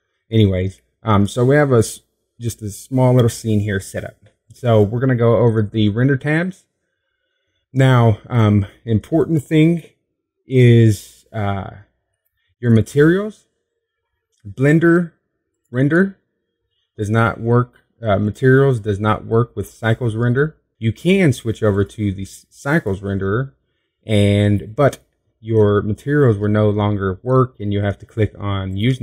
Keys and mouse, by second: 1.2 click, 1.9 click, 2.5 middle click, 6.3-10.3 middle drag, 15.4-17.3 drag, 18.8-20.7 drag, 20.7 middle click, 21.4-23.2 drag, 24.2-25.9 drag, 28.4-29.0 drag.